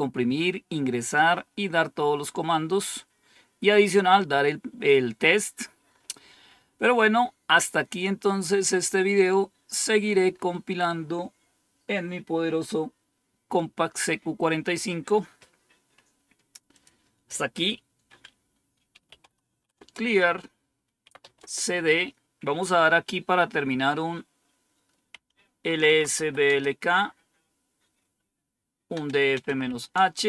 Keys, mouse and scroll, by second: 2.8-3.5 scroll down 2, 3.5-5.4 scroll down 1, 5.4-6.3 scroll down 2, 6.3 scroll down 1, 7.2-7.9 scroll down 1, 9.2-10.9 scroll up 4, 10.9-16.6 scroll up 1, 16.6 click, 18.7-21.4 typing, 25.3-26.5 typing, 28.6-30.1 typing.